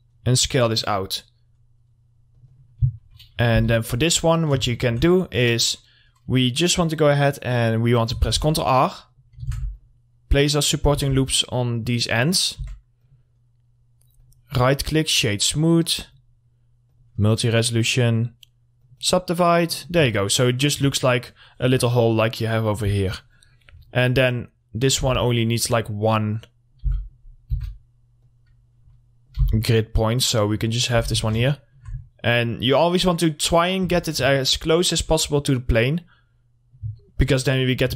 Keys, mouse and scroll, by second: 3.0 middle click, 3.2-3.7 scroll up 1, 3.7 w, 4.1 middle click, 8.3 ctrl+Num_Lock, 8.3 middle click, 8.5 ctrl+r, 8.7 click, 9.7 ctrl+r, 9.9 click, 11.2 ctrl+r, 11.4 click, 12.8 Tab, 13.2 click, 14.4 right click, 15.1 click, 19.7 middle click, 20.0 scroll down 1, 20.3 alt+middle click, 21.3 scroll down 1, 21.6 click, 22.4-22.7 scroll up 1, 23.4 click, 24.0 middle click, 24.1 scroll down 1, 24.6 click, 25.2 r, 25.8 click, 27.0 w, 27.2 middle click, 27.4 scroll up 1, 27.7 r, 28.4 click, 29.6 w, 30.0 click, 31.2 z, 31.5 scroll down 1, 31.7 alt+middle click, 32.1 scroll down 1, 32.9 click, 34.0 z, 34.5 alt+middle click, 35.3-37.2 drag, 37.2 alt+middle click, 37.7-37.9 scroll down 1.